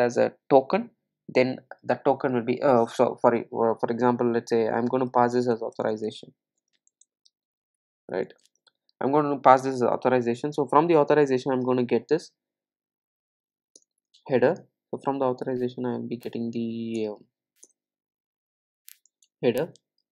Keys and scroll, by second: 17.0 alt+Return.